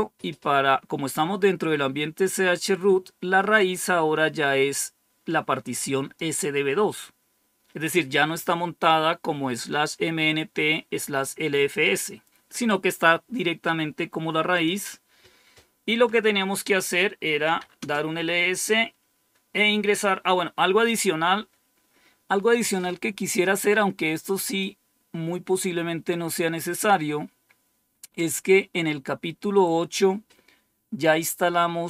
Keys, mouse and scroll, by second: 3.5-6.1 drag, 14.4 click, 17.1-18.0 typing, 24.3 click, 26.1-26.8 scroll down 2, 26.8-27.7 scroll down 2, 27.9 scroll down 2, 28.5-29.2 scroll down 2, 29.2-29.9 scroll down 1, 29.9-30.6 scroll down 1.